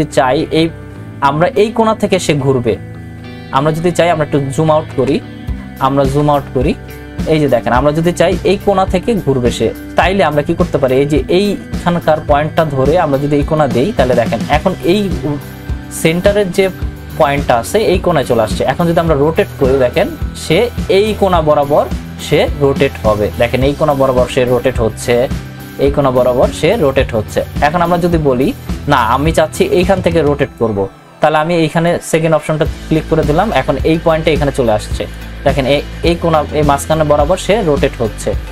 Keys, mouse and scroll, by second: 4.7 ctrl+-, 13.4 click, 19.5-29.5 drag, 31.7 click, 35.1 click, 35.1-38.5 drag.